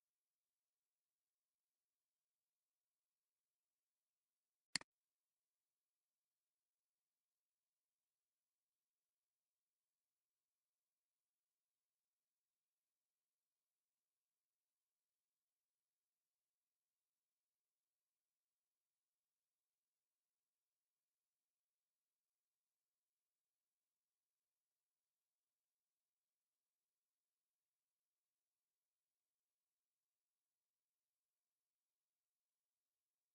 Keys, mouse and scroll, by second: 0.0-1.1 typing, 7.5 scroll down 1, 8.3 typing, 9.6 scroll down 1, 10.4 typing, 10.5 scroll down 1, 11.4 scroll up 1, 12.1 scroll up 1, 12.8 typing.